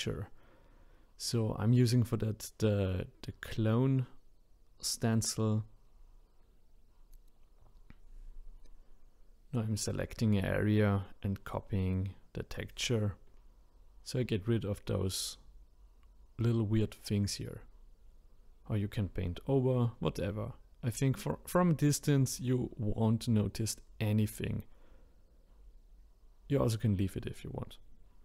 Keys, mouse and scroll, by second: 0.5-10.7 drag, 10.7-12.1 scroll up 7, 12.1 shift+click, 13.6 shift+click, 14.5-19.2 ctrl+drag, 21.1 shift+click, 21.8-25.9 ctrl+drag.